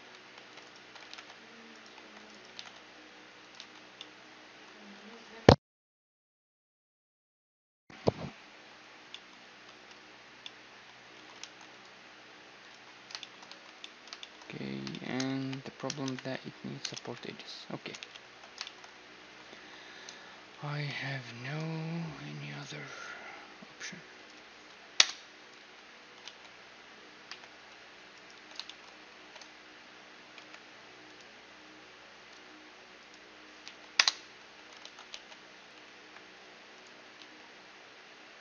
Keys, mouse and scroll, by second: 0.0-2.1 typing, 0.4-3.8 drag, 3.2 z, 3.8-6.4 middle drag, 4.6 a, 8.3-16.8 middle drag, 10.8 a, 11.0 ctrl+r, 13.1 a, 15.0 KP_1, 15.7 ctrl+KP_1, 16.8 KP_3, 17.6 ctrl+KP_3, 18.3-20.5 middle drag, 18.8 a, 19.8 a, 20.5 k, 25.2 z, 25.9 ctrl+z, 26.1-27.9 middle drag, 26.9 k, 27.9-30.0 right drag, 28.3 z, 29.2 z, 30.0 middle click, 30.0 k, 34.0 z, 34.8 z, 35.6 k.